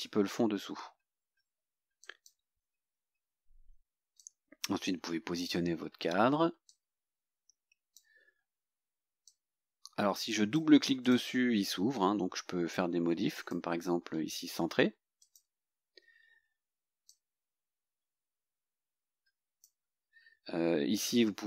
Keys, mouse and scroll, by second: 2.1 click, 4.3-5.8 drag, 6.8-8.2 drag, 9.3-10.8 drag, 11.1 click, 13.4 click, 15.3 click, 17.2-19.9 drag.